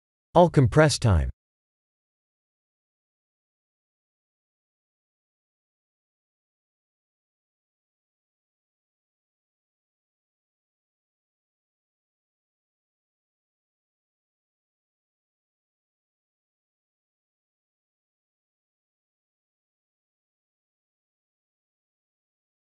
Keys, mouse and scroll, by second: 0.3 alt+shift+middle click, 3.9 click, 4.4 click, 6.3 alt+shift+middle click, 6.9 click, 7.9 click, 8.1 drag, 8.4 click, 8.7 click, 9.0 click, 9.7 click, 10.0 click, 10.9 b, 12.4 ctrl+z, 12.6 b, 13.9 click, 14.2 click, 14.5 click, 15.0 click, 15.7 click, 16.0 Tab, 17.3 Tab, 17.9 shift+z, 18.0 b, 18.9 drag, 19.0 click, 19.3-21.6 typing, 20.7 click, 20.9 click, 21.0 click.